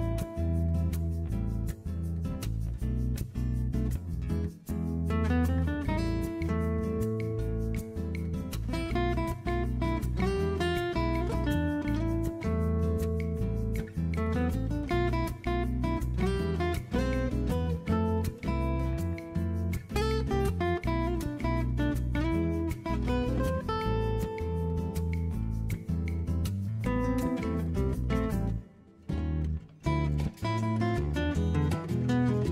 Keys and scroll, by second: 2.5-2.9 typing, 4.5 b, 6.2-8.1 typing, 20.6 super+z, 20.8 super+r, 21.4 b, 24.3 super+z.